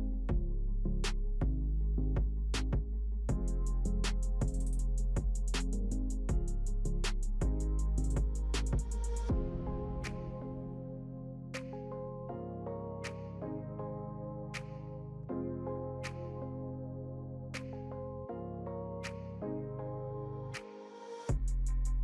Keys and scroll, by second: 4.8 ctrl+0, 8.0 ctrl+v, 14.8 ctrl+t, 15.6 ctrl+alt+shift+t.